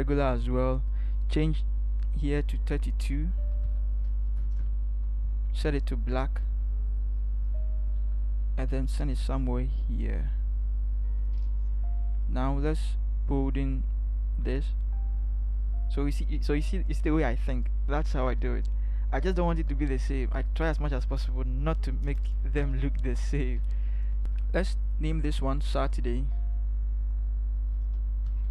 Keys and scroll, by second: 3.1-4.1 typing, 4.3 Return, 8.1 v, 10.0 v, 22.6 ctrl+j, 23.4 ctrl+shift+Down, 24.2 ctrl+alt+z.